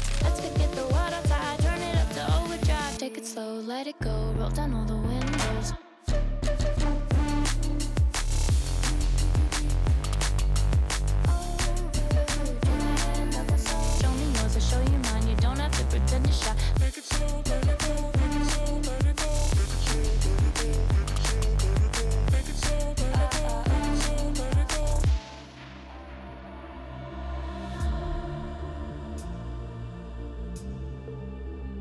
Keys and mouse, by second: 1.9 click, 4.6-5.6 drag, 6.1-8.2 drag, 8.4 shift+drag, 9.5-10.4 drag, 12.8 g, 14.3 shift+drag, 15.1-15.7 middle drag, 17.6 g, 18.6 x, 18.9 x, 19.0 Tab, 19.6 Tab, 21.0-22.0 drag, 22.6-23.2 middle drag, 23.8 KP_1, 25.4 click, 26.2 s, 28.7 s, 31.3-31.7 drag, 31.7 s.